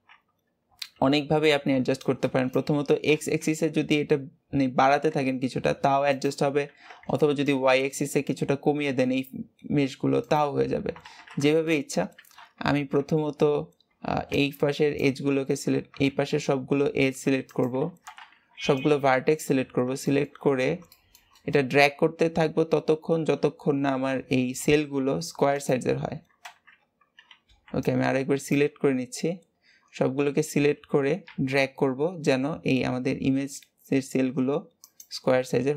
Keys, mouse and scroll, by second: 1.6 b, 7.0 b, 11.0 alt+z, 11.6-12.6 shift+middle drag, 12.6 alt+z, 14.0 b, 16.0 alt+a, 17.4 click, 17.7 alt+z, 18.5 b, 19.5-20.0 scroll up 3, 20.0 shift+middle click, 20.8 shift+middle click, 21.4 scroll up 2, 23.6 g, 25.8-26.4 scroll down 6, 26.4 alt+z, 26.6-27.3 scroll down 3, 27.3 b, 28.7-29.7 scroll up 11, 29.7-30.2 scroll down 6, 30.8 g.